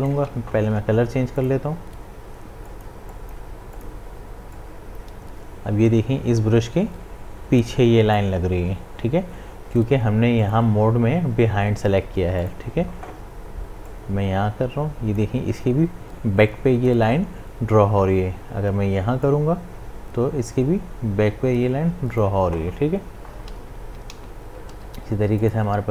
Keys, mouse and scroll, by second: 0.6 ctrl+z, 1.4-17.6 drag, 19.3-23.7 drag, 23.7 ctrl+z, 24.7 ctrl+z, 25.4 click.